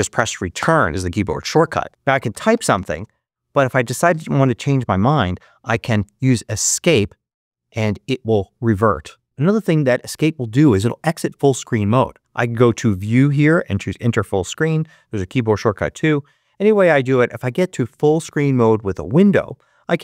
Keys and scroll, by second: 0.4 Return, 2.2 a, 6.5 Escape.